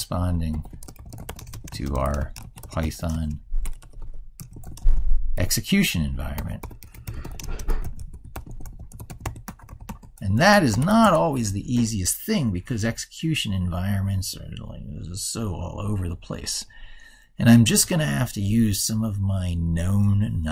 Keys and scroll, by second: 16.6 ctrl+super+Right.